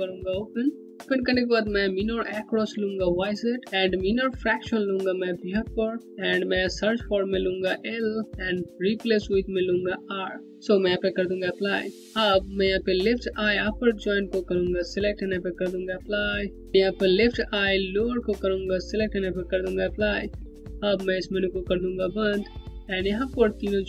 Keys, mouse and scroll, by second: 6.4 click, 11.0 click, 14.0 click, 17.9 click.